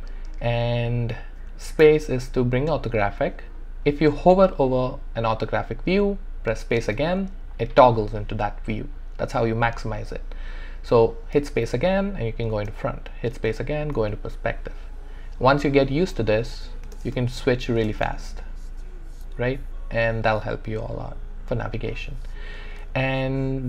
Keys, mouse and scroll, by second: 1.6 space, 6.8 space, 9.1 typing, 11.4 space, 12.8 typing, 16.9 typing.